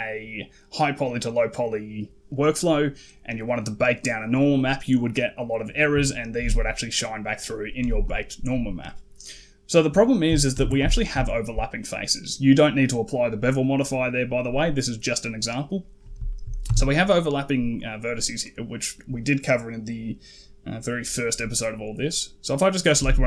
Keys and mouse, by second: 6.2-7.1 typing, 6.3 click, 7.1 click, 7.8 middle click, 10.4 ctrl+a, 10.8 shift+middle drag, 16.1 shift+middle drag, 16.5 Tab, 18.2 click, 18.5 click, 22.8 g.